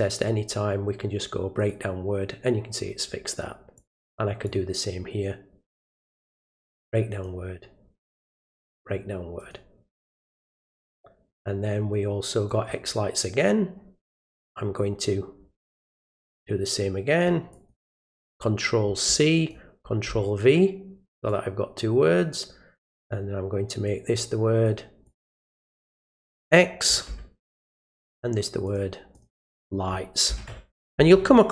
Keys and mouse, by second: 1.6 click, 3.8 click, 5.7 right click, 7.1 click, 8.5 right click, 9.4 click, 10.8-12.5 drag, 16.4 click, 17.5 click, 19.4 click, 21.3 click, 23.9 click, 25.0 click, 25.2 click, 26.0 click, 27.9 click, 28.6 click, 29.1 click, 29.3 click.